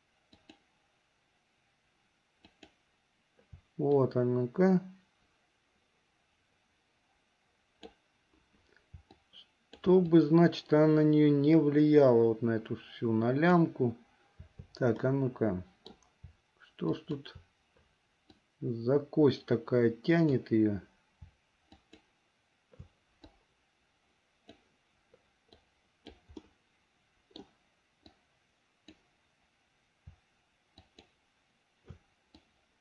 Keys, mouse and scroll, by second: 0.4 shift+click, 2.5 shift+click, 4.1-8.2 drag, 10.2-13.8 drag, 15.2 middle click, 17.1 shift+click, 18.5-20.5 drag, 21.9 shift+click, 23.4-24.8 drag, 25.7 click, 26.7 middle click, 28.3 click, 30.9 shift+click, 32.5-32.8 drag.